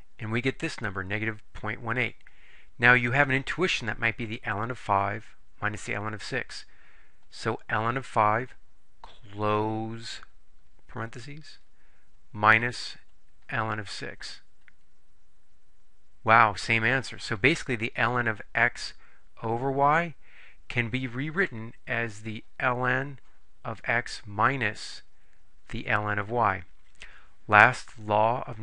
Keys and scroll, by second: 8.2 5, 10.2 ), 12.4 -, 14.0 6, 14.8 Return.